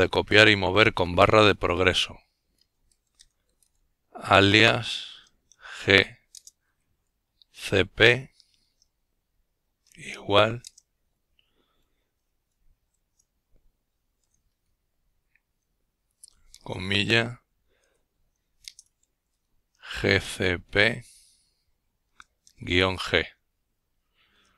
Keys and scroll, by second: 0.0-1.4 typing, 3.5-4.3 typing, 5.9-7.7 typing, 10.2 typing, 11.4-14.8 typing, 16.1-16.5 typing, 18.0 typing, 20.6 Return, 21.5-24.5 typing.